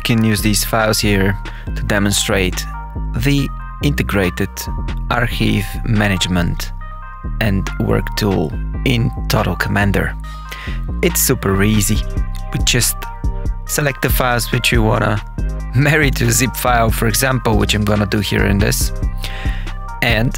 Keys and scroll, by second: 0.2 Page_Up, 2.5 KP_Subtract, 3.9 Right, 4.3 BackSpace, 5.2 shift++, 5.7 BackSpace, 6.4 Return, 8.1 Tab, 9.0 Tab, 10.2 Page_Up, 14.5 Page_Down, 15.6 Up, 16.5 Up, 17.1 Insert.